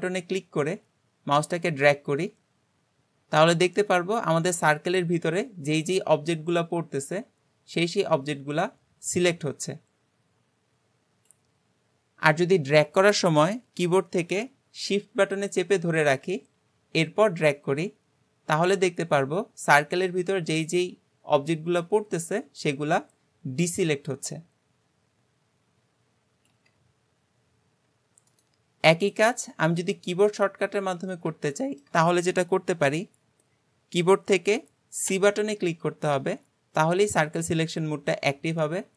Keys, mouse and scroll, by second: 29.1 click, 30.0 scroll up 1, 30.3-34.5 middle drag.